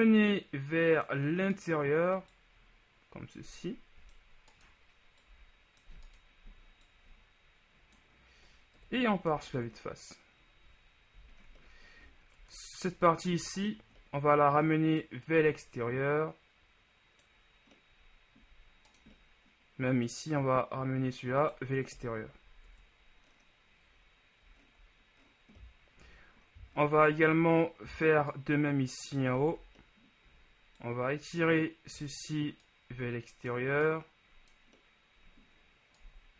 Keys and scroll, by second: 8.9 KP_1, 9.4 Tab, 12.5 Tab, 22.2 KP_1, 22.7 Tab, 27.1 Tab, 29.5 ctrl+z.